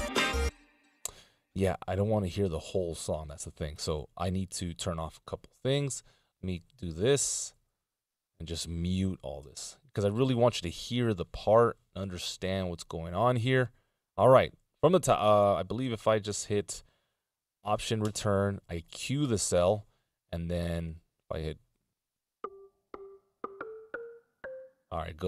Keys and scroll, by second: 6.4 shift+Down, 6.6 shift+Down, 6.8 shift+Down, 7.0 shift+Down, 7.5 shift+Down, 7.8 shift+Down, 8.2 shift+Down, 9.3 ctrl+m, 18.1 alt+Return, 24.5 space.